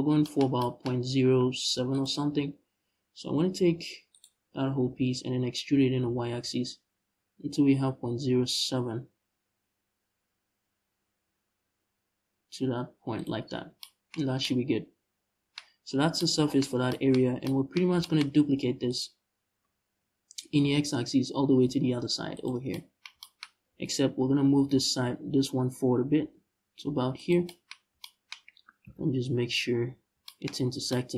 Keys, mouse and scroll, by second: 1.1 Tab, 1.6 right click, 1.9 Tab, 3.8 right click, 4.5 l, 5.3 e, 12.9 shift+click, 13.1 scroll down 2, 13.2 Tab, 13.9 scroll up 1, 16.4 scroll down 1, 18.2 Tab, 18.5 right click, 19.3 l, 20.1 shift+d, 22.1 shift+click, 23.1-24.1 scroll up 1, 24.1 g, 27.0 shift+click, 28.5 KP_Decimal, 29.2-29.9 scroll up 1, 30.3 scroll up 1.